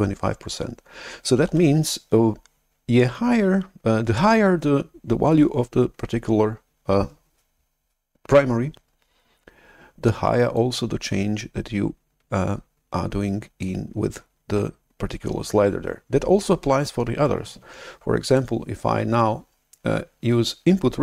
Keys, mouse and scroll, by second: 1.5 shift+super+F11, 10.5-14.5 drag, 18.2-20.8 drag.